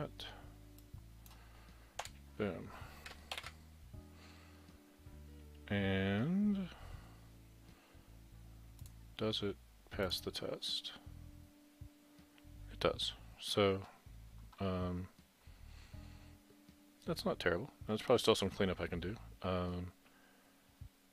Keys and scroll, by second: 2.1 Delete, 3.4 ctrl+shift+b.